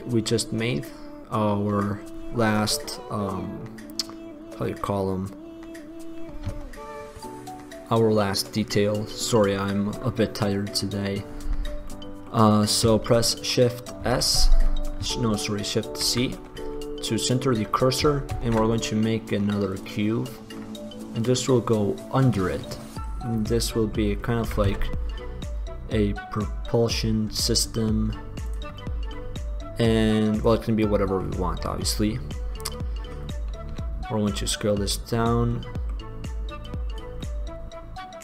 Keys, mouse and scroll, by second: 9.6-14.1 middle drag, 14.1 shift+s, 16.0 shift+c, 18.5 shift+a, 21.5-22.1 middle drag, 22.1-23.5 drag, 24.6 s, 28.7 click, 29.0-30.7 middle drag, 31.5 middle click, 33.8 s, 34.9-36.5 middle drag, 37.4-38.2 middle drag.